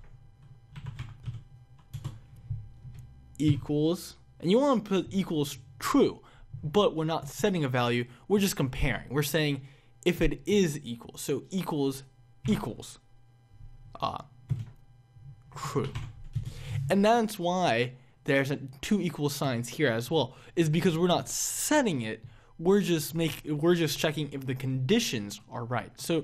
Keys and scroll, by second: 2.1 Return, 16.9 Return.